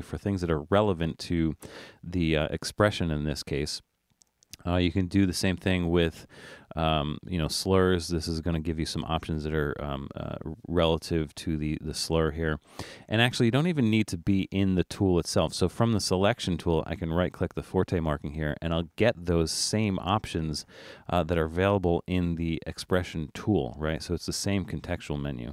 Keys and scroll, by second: 3.5 Escape, 4.6 Escape, 12.9 Escape.